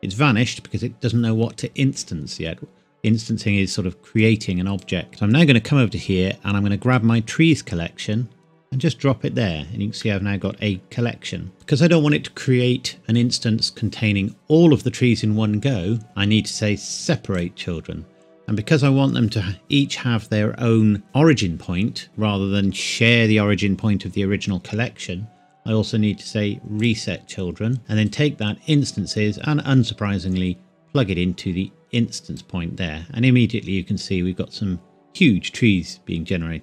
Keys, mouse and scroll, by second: 2.4-4.1 scroll down 1, 4.2 click, 6.9 click, 10.0 middle click, 10.7 scroll up 1, 10.8-11.5 scroll down 1, 11.5-12.5 scroll up 1, 16.0-17.3 scroll up 1, 17.3 click, 26.8 click, 28.1 click.